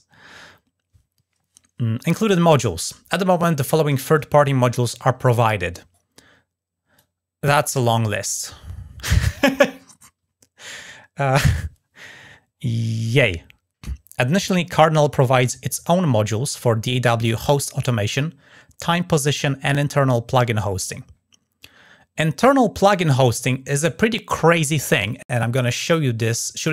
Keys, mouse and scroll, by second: 2.4-2.9 scroll down 2, 6.7-9.0 drag, 20.9-21.2 scroll down 2, 22.2-23.6 drag, 25.9 click.